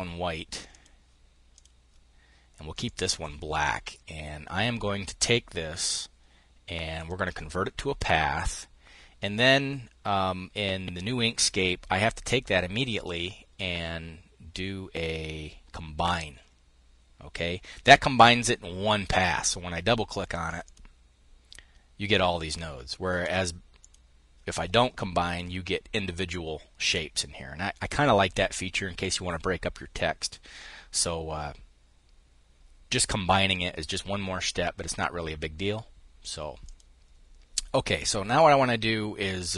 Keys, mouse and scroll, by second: 0.2 click, 1.1 click, 2.4 click, 6.5 click, 7.5 click, 12.4 click, 15.6 click, 18.7 click, 20.0 click, 22.7 click, 36.2 click, 37.5 click.